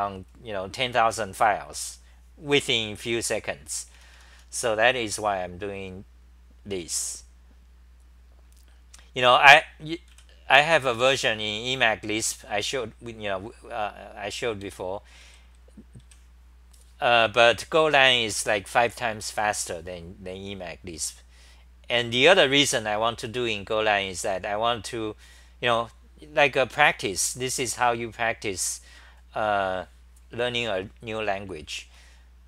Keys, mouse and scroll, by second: 3.9 t, 4.1 t, 4.3 t, 5.7-10.1 scroll down 14, 10.1 w, 13.7-15.2 typing, 20.0-20.4 scroll down 3, 20.3 scroll, 20.4-24.2 scroll down 4, 24.2 t, 27.4-30.9 scroll down 4, 31.7 t, 32.0 t.